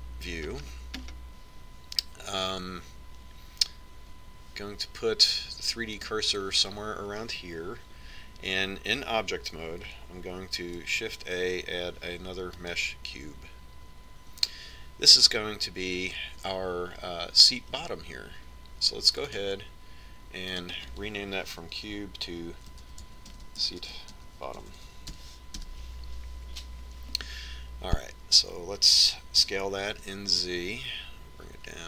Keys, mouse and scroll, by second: 0.8 KP_1, 2.0-4.5 middle drag, 7.5-9.9 drag, 12.1 shift+a, 20.9-24.1 drag, 26.4 t, 31.1 s.